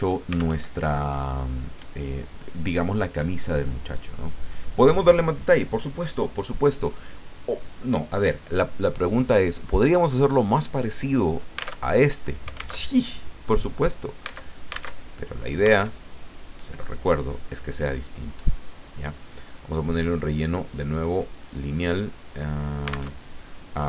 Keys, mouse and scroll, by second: 0.6 alt+Tab, 4.1 click, 11.9 alt+Tab, 12.8 alt+Tab, 15.0 alt+Tab, 15.9 alt+Tab, 19.4 click, 20.0 click, 23.1 alt+Tab.